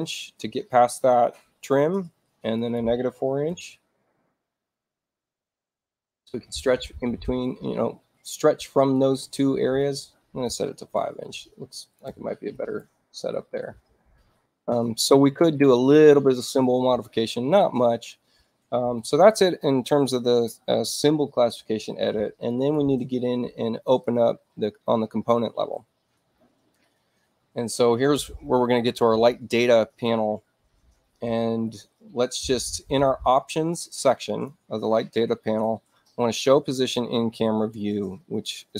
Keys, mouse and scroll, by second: 0.2 click, 2.6 click, 3.5 4, 5.7 click, 6.2 click, 6.8 click, 9.7 click, 11.7 click, 12.0 5, 12.7 Tab, 18.9 click, 22.4 right click, 23.8 click, 29.0 click, 33.7 click, 35.4 click.